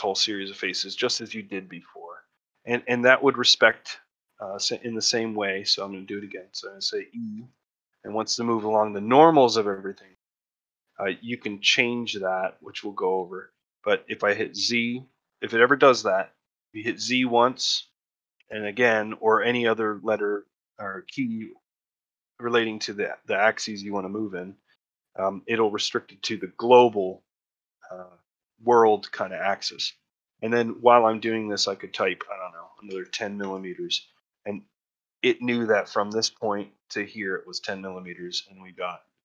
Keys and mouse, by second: 0.2 middle click, 2.3-3.5 middle drag, 5.8 middle click, 7.2 e, 34.4 shift+middle click, 34.9 ctrl+middle click, 37.8 ctrl+middle click, 38.7 shift+middle click.